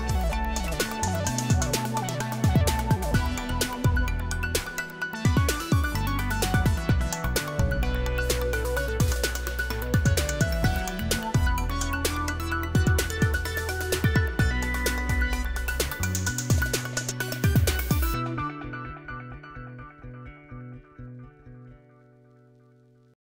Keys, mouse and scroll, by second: 2.7 click, 3.5 click, 7.1 click, 7.9 click, 8.3 click, 15.1 click, 16.1 click, 18.2 click, 20.0 click, 23.2 click.